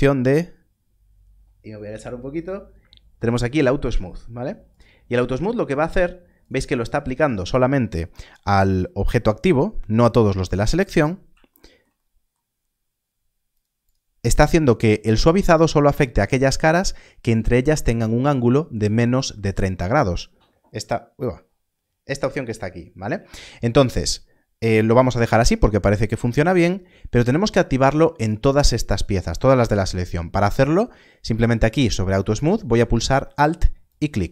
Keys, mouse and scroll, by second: 4.7 click, 11.2 click, 13.5 click, 28.2 click, 33.1 click.